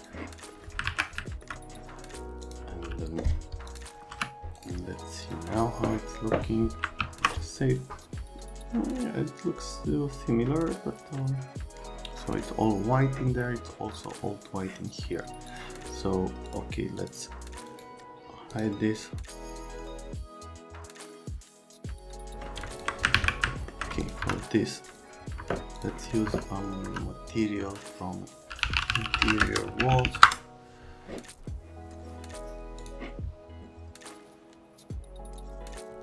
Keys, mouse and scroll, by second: 0.9 alt+q, 1.2 alt+middle click, 2.4 click, 3.7 click, 4.1 x, 4.6 scroll up 1, 5.2 click, 7.0 ctrl+s, 15.5 click, 16.5 click, 17.0 click, 17.7 right click, 18.5 click, 18.9 click, 19.4 click, 19.7 ctrl+click, 20.0-20.9 typing, 20.6 alt+middle click, 21.0 F3, 21.3 F3, 21.4 alt+scroll up 1, 21.8 ctrl+click, 22.1 alt+middle click, 22.7 ctrl+click, 23.1 alt+q, 23.5 alt+middle click, 24.2 F3, 25.4 F3, 26.3 F3, 26.9 F3, 28.4-30.6 typing, 32.8 click.